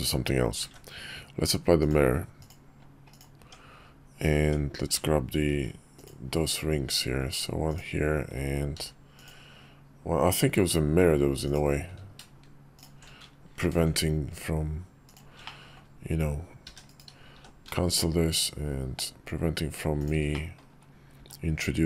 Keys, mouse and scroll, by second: 0.3 ctrl+`, 3.1 Tab, 4.7 Tab, 5.2 ctrl+r, 8.5 ctrl+r, 13.3 ctrl+b, 15.2 middle click, 16.4 e, 17.0 s, 20.0 middle click, 20.9 s.